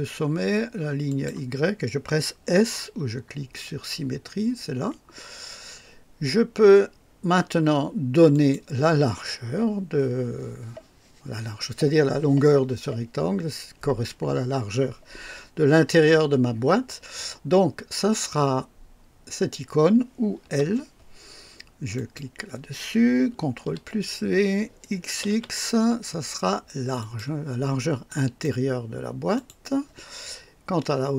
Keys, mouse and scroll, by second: 1.0 click, 4.7 s, 8.3 click, 20.4 l, 21.9 click, 23.5 ctrl+v, 24.8-25.8 typing, 26.9 click, 28.0 click, 29.3 click.